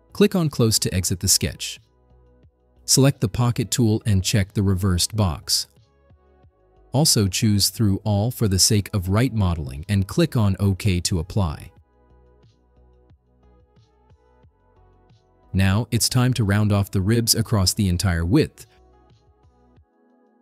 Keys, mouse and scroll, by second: 1.1 click, 3.5 click, 5.9 click, 7.1 click, 7.6 click, 11.7 click, 13.3 scroll down 2, 13.7-16.0 drag.